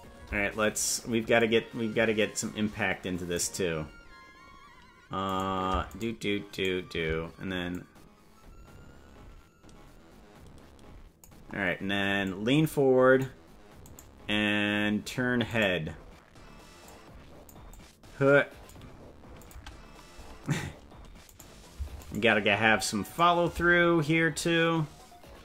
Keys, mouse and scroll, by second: 1.3-3.3 drag, 5.5 right click, 6.1 shift+right click, 6.7 right click, 7.7-11.2 drag, 12.2-13.2 drag, 13.9 right click, 15.6 right click, 16.8 click, 17.6-18.7 drag, 19.3 click, 19.5 space, 20.3 space, 21.5 right click, 22.3 shift+right click, 23.1 right click.